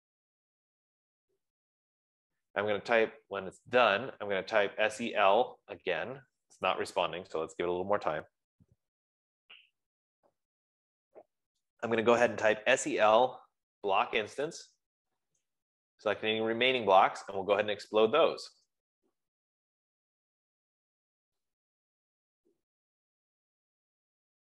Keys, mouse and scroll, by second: 3.0 s, 6.5 typing, 13.4-15.2 typing, 15.8 Return, 17.5-18.9 typing, 19.1 Return, 20.5 typing.